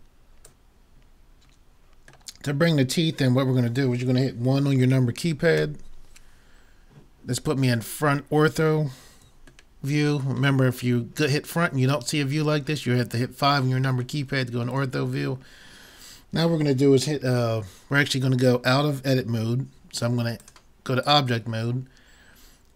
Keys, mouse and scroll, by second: 2.3-4.1 middle drag, 5.6 KP_1, 6.4-8.8 middle drag, 9.8-11.6 middle drag, 21.1-22.3 drag.